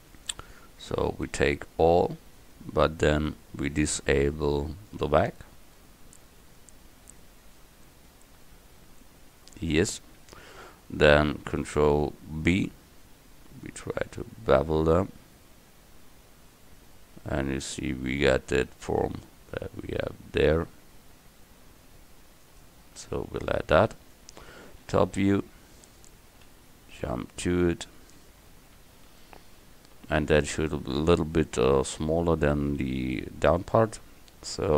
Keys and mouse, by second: 1.1 a, 1.3 a, 4.5 middle click, 4.9-6.2 middle drag, 6.2 click, 7.8-8.9 middle drag, 10.3 middle click, 12.6 ctrl+b, 23.2 a, 25.1 KP_7, 26.5 KP_Decimal.